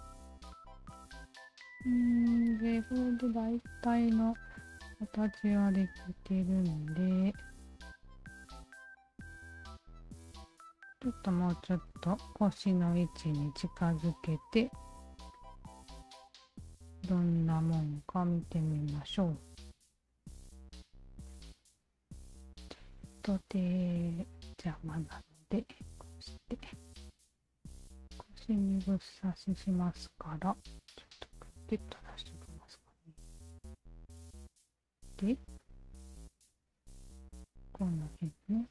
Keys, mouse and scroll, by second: 0.2 alt+middle click, 0.5-2.4 alt+drag, 2.8 alt+click, 5.1 alt+click, 6.1-7.2 alt+drag, 7.4-10.3 alt+drag, 10.9 alt+click, 11.4 click, 12.6-14.9 alt+drag, 15.8-20.4 alt+drag, 20.9 Tab, 21.3-22.1 alt+drag, 24.0 alt+click, 24.8 alt+middle drag, 25.3-26.1 alt+drag, 26.7 alt+click, 27.5 Tab, 28.0 alt+right click, 28.4 alt+click, 29.9 alt+click, 30.3 alt+click, 31.0 alt+click, 31.9 alt+click, 33.5 alt+click, 34.1 Tab, 35.3-36.5 alt+drag, 36.8-37.5 alt+drag, 38.3 f.